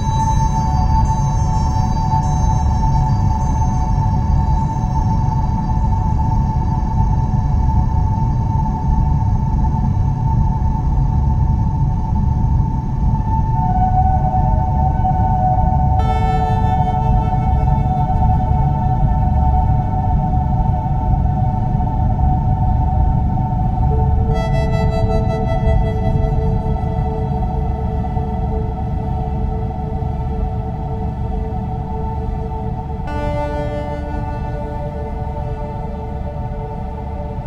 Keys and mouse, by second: 2.9-4.0 middle drag, 6.0 Tab, 7.9 ctrl+r, 15.9 click, 17.6 a, 21.4 x, 24.4 click, 26.1 a, 28.3 1, 30.0 click, 33.8 click.